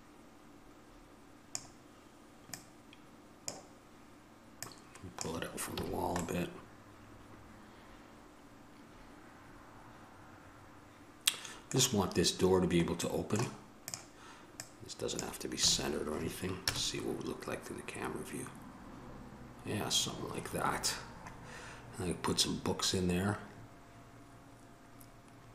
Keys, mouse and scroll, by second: 5.9 a, 6.1 middle click, 7.1 middle click, 7.6 middle click, 13.2-15.4 middle drag, 15.9 a, 16.8 KP_0, 24.7-25.5 middle drag.